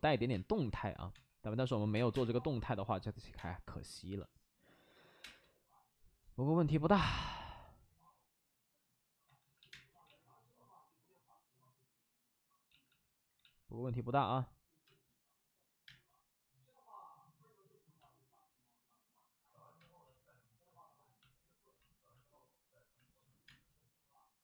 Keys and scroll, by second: 0.2-2.0 typing, 3.3 space, 4.9 5, 5.1 space, 6.7 ctrl+z, 6.9 space, 9.2 ctrl+z, 9.3 ctrl+z, 9.5 ctrl+z, 9.6 space, 9.9 ctrl+z, 12.6 ctrl+z, 13.3 ctrl+z, 14.8 space, 15.8 space, 19.7 space, 20.1 ctrl+z, 23.4 space.